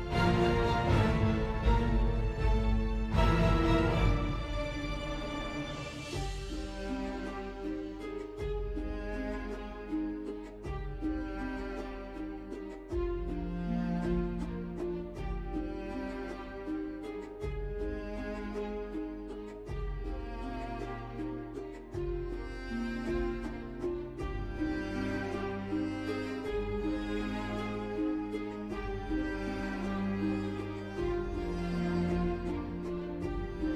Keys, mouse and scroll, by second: 4.4 BackSpace, 7.3 BackSpace, 24.1 i.